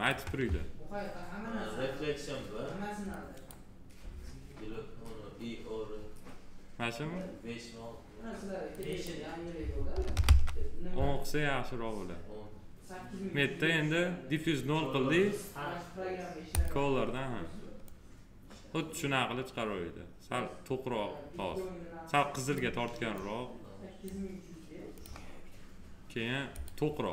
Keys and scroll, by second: 9.9 1, 10.5 Return.